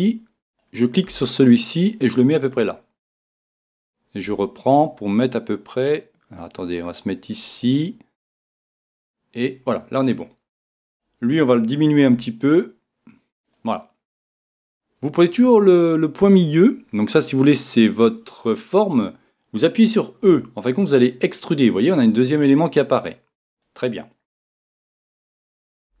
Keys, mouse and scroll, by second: 1.1-2.5 right drag, 1.1 g, 2.5 g, 2.6 click, 4.2-6.3 right drag, 4.3 g, 7.7 click, 12.0-13.5 right drag, 12.0 g, 13.5 click, 15.1-20.2 right drag, 20.2 e, 23.6 click, 25.4 a, 25.9 a.